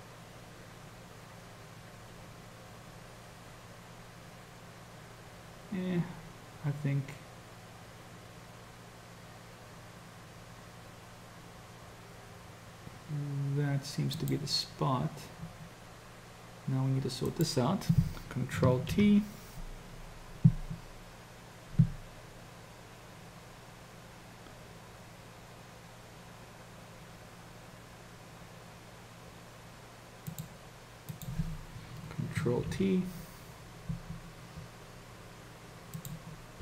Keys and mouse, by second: 17.3 click, 18.9 ctrl+t, 31.2 click, 32.7 ctrl+t.